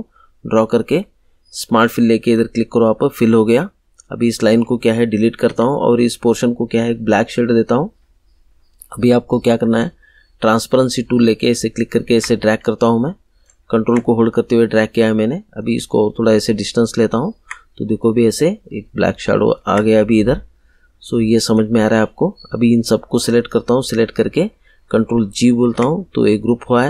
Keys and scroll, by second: 5.4 Delete, 25.6 ctrl+g.